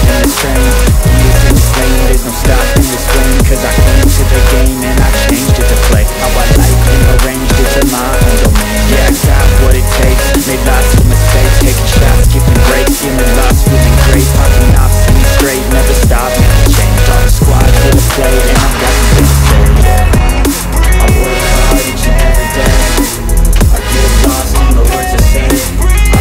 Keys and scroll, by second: 0.0 shift+F2, 4.2 c, 4.3 e, 4.9 shift+F2, 9.8 F3, 16.0 F3, 16.7 Escape, 17.0 F2, 21.2 F3, 21.8 Escape, 22.9 F2.